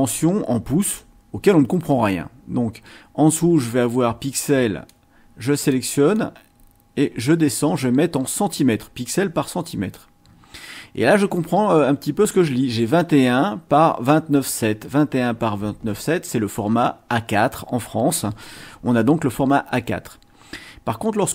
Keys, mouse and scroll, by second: 4.9-5.9 drag, 8.5-9.9 drag.